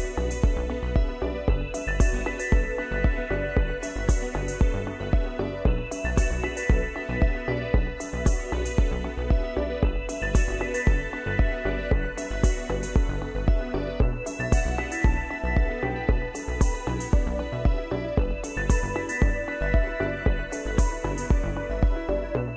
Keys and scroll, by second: 8.9 ctrl+c, 10.3 ctrl+f.